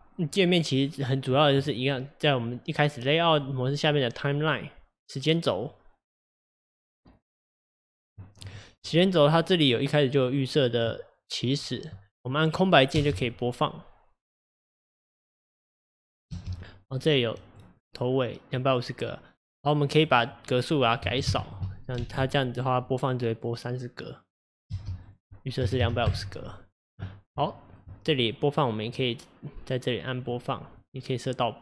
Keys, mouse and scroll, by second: 10.3-12.9 drag, 12.9 space, 16.4 space, 17.1-22.0 drag, 22.0 space, 24.7 space, 25.0 click, 27.4-28.9 shift+middle drag, 28.9-31.6 drag.